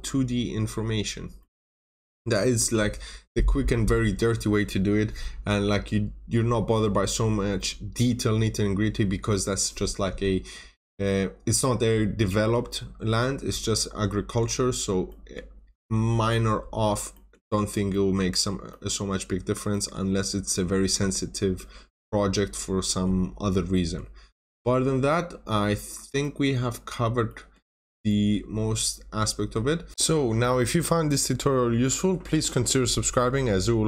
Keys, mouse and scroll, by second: 1.3 middle click, 1.6-2.1 scroll up 1, 11.6-13.1 scroll down 1, 13.1 scroll up 1, 13.7 middle click, 14.0-14.5 scroll down 1, 14.5-15.0 scroll up 1, 15.0 middle click, 15.6-17.0 scroll up 1, 17.0 middle click, 18.3-18.6 scroll down 1, 18.6 middle click, 20.1-20.7 scroll down 1, 20.7-22.2 scroll up 1, 22.8 middle click, 24.2-25.2 scroll up 1, 25.8 scroll down 1, 26.2 middle click, 26.4 scroll down 1, 27.2 middle click, 27.5 scroll down 1, 28.0 middle click, 29.9 ctrl+n.